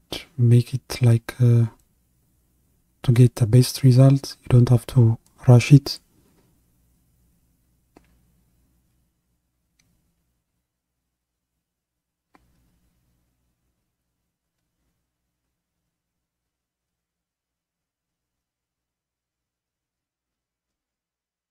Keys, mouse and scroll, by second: 1.1-9.6 drag, 9.6 ctrl+z, 10.6-13.3 drag, 13.3 ctrl+z, 14.1-21.5 drag.